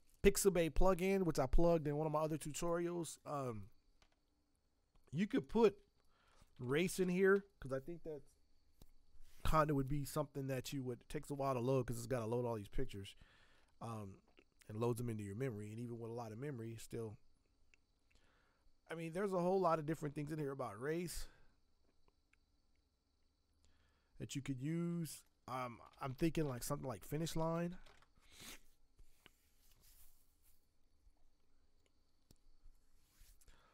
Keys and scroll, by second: 6.3-7.5 typing, 25.6-28.3 typing.